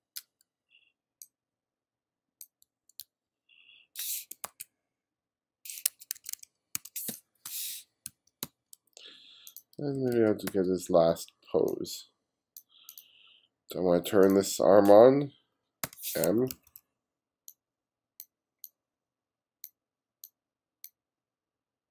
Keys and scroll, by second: 2.7 f, 3.0 g, 4.5 super+z, 6.2 1, 7.1 space, 8.1 f, 8.4 g, 9.8 b, 15.9 m, 16.4 2.